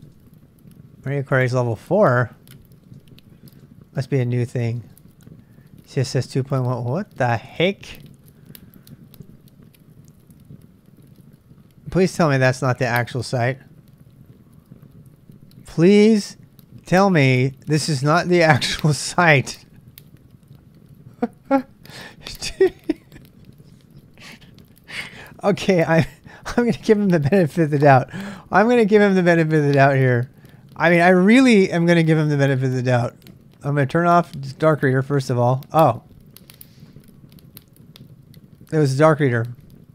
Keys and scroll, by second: 0.0-6.4 space, 6.4 k, 6.6 k, 7.5 ,.